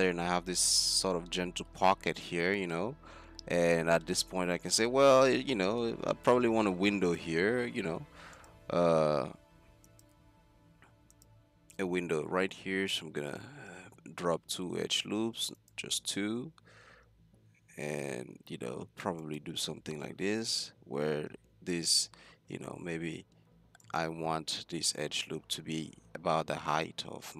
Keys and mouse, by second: 1.7-4.8 middle drag, 5.3 middle click, 6.6 Tab, 7.5 Tab, 7.7 z, 8.1 Tab, 9.3 z, 10.4 Tab, 10.9 Tab, 11.5 Tab, 12.9 ctrl+r, 16.9 ctrl+r, 20.6 a, 25.3 middle click, 25.6-27.2 drag, 27.2 middle click.